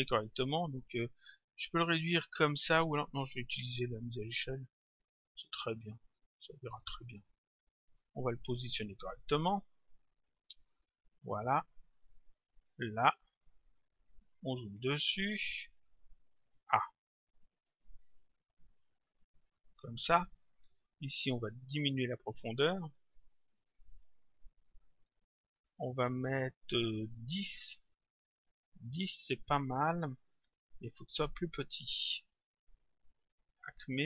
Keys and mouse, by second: 0.5 click, 3.6 click, 7.9 click, 9.4 click, 11.5 click, 15.7 click, 17.6 click, 18.8 click, 20.7 click, 22.5 click, 25.6 click, 29.1 click, 31.1 click.